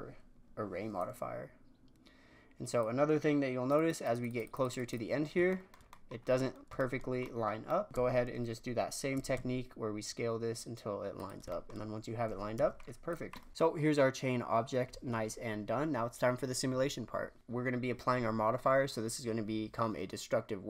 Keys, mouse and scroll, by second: 5.4-6.1 shift+middle drag, 6.1 scroll down 4, 6.3-9.1 middle drag, 9.1 s, 11.4-12.5 shift+middle drag, 12.5 Tab, 12.7-13.3 scroll down 2, 13.1 click, 13.3-16.8 middle drag, 17.4 n.